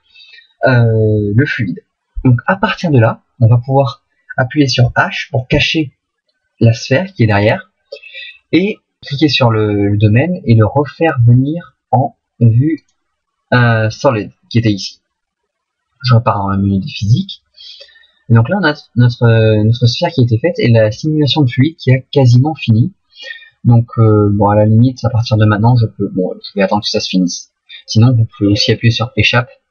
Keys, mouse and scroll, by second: 5.5 h, 9.0 right click, 15.1 click, 17.5 click.